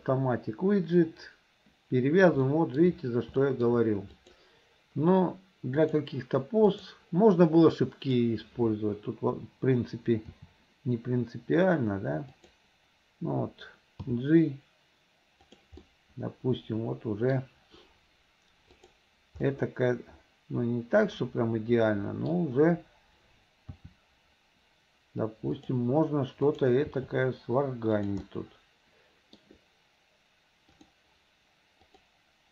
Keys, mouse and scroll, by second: 2.5 shift+middle click, 3.4 shift+middle click, 4.2 click, 5.8-7.0 drag, 7.7 click, 12.3 r, 14.0 g, 15.9-17.5 middle drag, 18.8 click, 19.5-22.4 middle drag, 24.4 r, 26.5 click, 27.7 r, 28.3-29.4 middle drag.